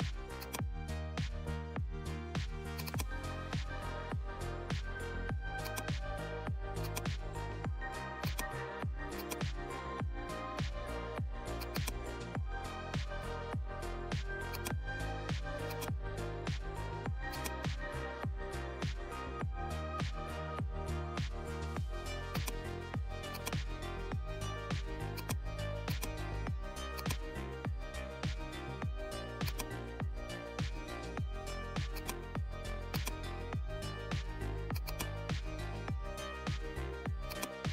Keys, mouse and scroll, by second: 0.3 click, 2.7 click, 5.6-11.6 drag, 14.5 click, 15.6 click, 19.0 right click, 22.2 right click, 22.3-34.7 drag, 37.2 click, 37.3 click.